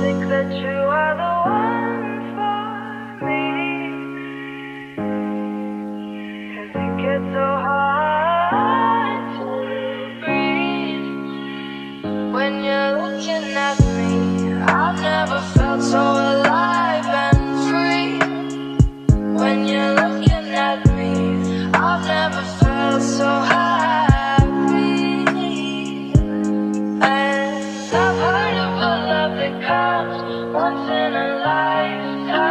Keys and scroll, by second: 0.8 ctrl+space, 1.5 f, 2.7 Return, 32.3 Delete.